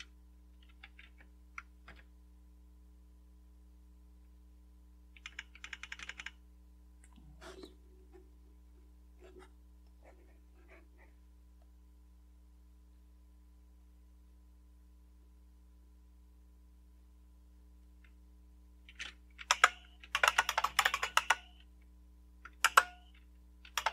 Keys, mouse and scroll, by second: 0.0-1.5 typing, 1.8 Return, 3.0 typing, 5.1-6.0 typing, 12.2-15.1 scroll up 3, 15.1 scroll up 1, 15.2-15.9 scroll down 2, 15.9-16.8 scroll down 1, 19.4-21.5 typing, 22.5 Return, 23.4-23.9 typing.